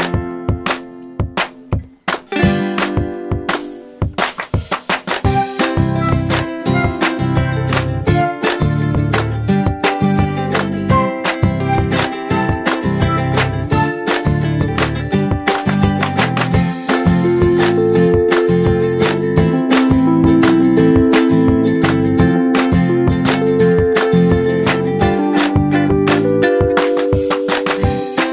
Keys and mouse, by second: 6.4 Down, 7.8 click, 9.0 Up, 10.3 click, 13.2-13.8 drag, 15.9 click, 17.3 m, 19.0 click, 21.9 click, 26.6 click.